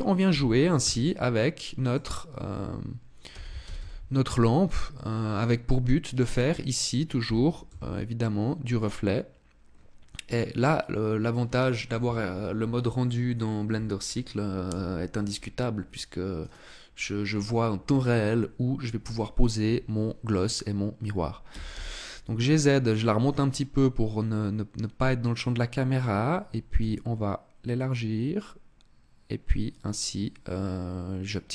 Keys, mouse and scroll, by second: 1.7 click, 2.9 r, 5.0 click, 7.0 g, 8.6 click, 16.0 right click, 21.1 g, 22.5 click, 26.3 s, 27.6 click.